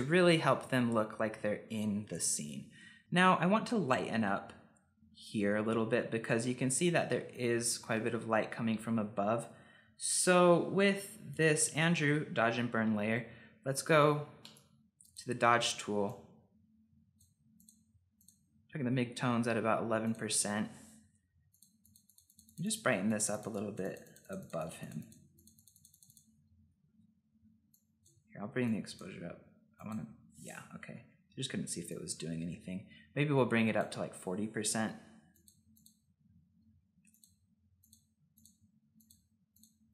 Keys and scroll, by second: 31.0 ctrl+z.